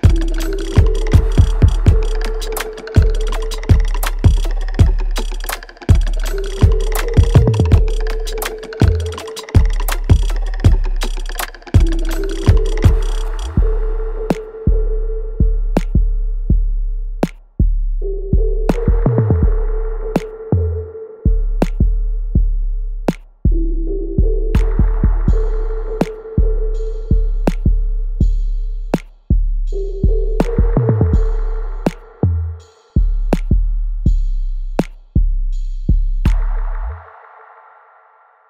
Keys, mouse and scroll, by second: 2.0-3.4 alt+drag, 4.2 alt+right click, 4.6 alt+click, 5.7 alt+right click, 6.1-7.3 alt+drag, 7.6 alt+right click, 8.2 alt+middle click, 8.9-10.7 alt+drag, 11.0-12.3 alt+middle drag, 12.3 click, 13.6 w, 14.7-16.0 drag, 16.0 alt+right click, 16.5-19.1 alt+drag, 19.1 space, 20.4 alt+right click, 21.5-23.7 drag, 23.7-25.9 right drag, 25.9-30.0 drag, 30.0 space, 31.2 right click, 31.7 alt+middle click, 32.1 alt+right click, 34.0 click.